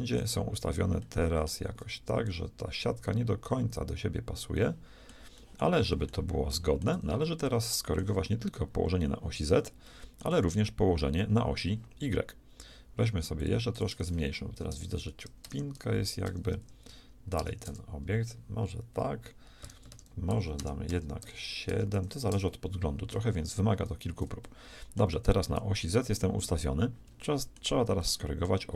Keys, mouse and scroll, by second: 4.6-9.8 shift+middle drag, 10.0-13.4 shift+middle drag, 13.4-15.8 drag, 19.9 Return, 20.9 BackSpace, 24.5-27.1 shift+middle drag, 27.3 shift+middle click.